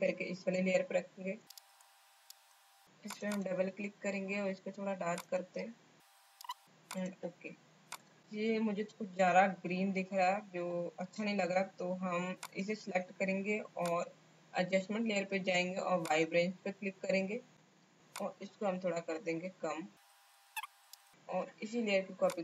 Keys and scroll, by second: 1.5 space.